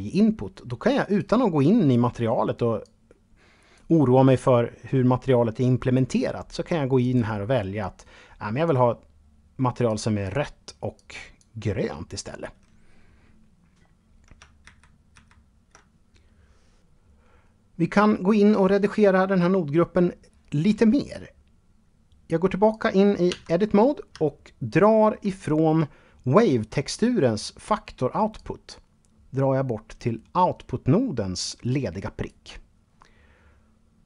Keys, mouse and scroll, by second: 0.3 click, 2.0 click, 6.2 click, 13.8 ctrl+z, 14.3 ctrl+z, 21.9 click, 22.5 Tab, 23.6 shift+middle click, 27.5-31.6 drag.